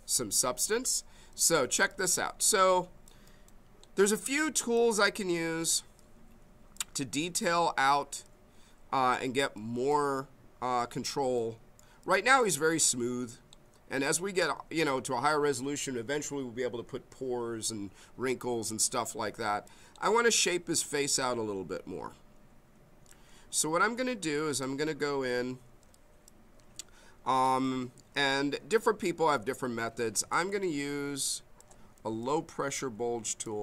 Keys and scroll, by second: 30.4 b, 32.0 m.